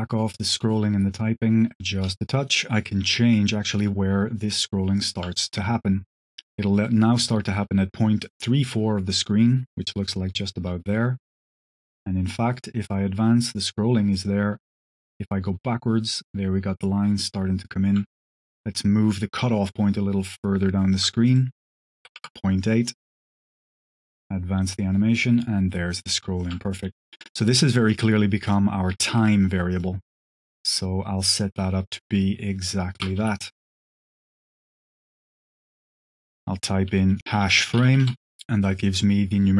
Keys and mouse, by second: 3.7-5.1 shift+drag, 10.5-17.8 shift+drag, 18.8-20.8 shift+drag, 21.2-22.4 drag, 23.4-26.3 shift+drag, 27.2 click, 27.7 middle drag, 28.3-29.5 drag, 29.6 click, 30.2 click, 30.5 middle click, 31.3-32.5 drag, 32.7 shift+click, 33.1 g, 34.8 click, 36.0-38.4 drag, 38.7 click.